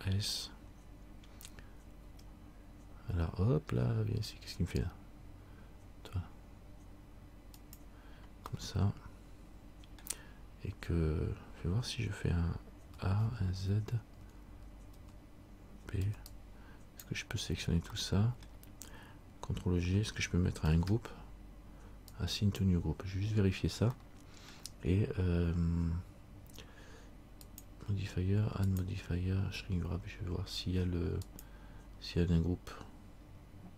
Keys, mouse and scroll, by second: 0.1 a, 2.2 s, 8.7 middle click, 13.0 a, 13.4 z, 14.4 z, 15.1 z, 16.2 b, 18.2 middle click, 20.8 ctrl+g, 24.2 middle click, 27.6 click, 33.0-33.7 scroll down 1.